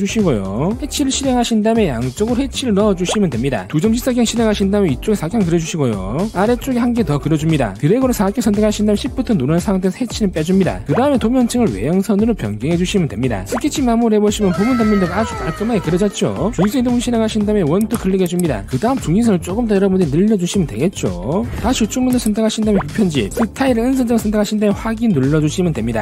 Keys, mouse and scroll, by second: 0.0 click, 0.8 click, 2.3 click, 2.8 click, 3.6 click, 3.8 3, 4.7 click, 5.7 click, 6.8 click, 7.9 click, 9.9 shift+click, 11.2 click, 13.0 click, 13.5 click, 14.9 click, 17.5 click, 18.2 click, 18.8 click, 19.7 click, 20.5 click, 21.8 click, 21.9 click, 22.4 click, 22.7 click, 24.8 click, 25.5 click.